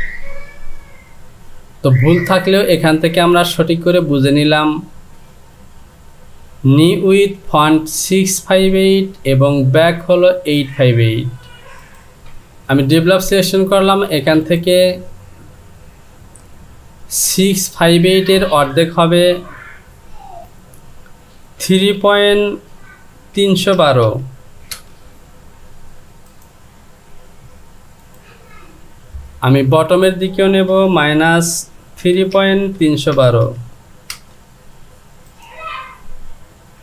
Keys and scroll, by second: 17.3 Down, 21.8 KP_3, 24.8 typing, 29.8 Down, 30.7 KP_Subtract, 32.0 KP_3, 34.1 Return.